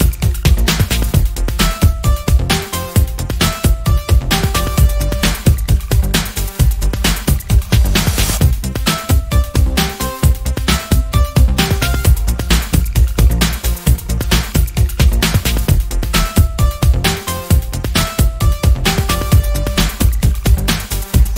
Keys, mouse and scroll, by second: 0.5-0.9 ctrl+shift+scroll down 2, 1.8-2.2 ctrl+scroll up 2, 2.5 ctrl+click, 3.4 ctrl+click, 5.0-6.5 drag, 7.6 click, 8.8 shift+click, 10.0 ctrl+shift+g, 10.9 ctrl+shift+d, 11.2-12.7 ctrl+shift+drag, 13.4 ctrl+click, 14.3 ctrl+click, 16.2 click, 16.6 click, 18.9 ctrl+click, 19.8-20.1 ctrl+scroll down 2.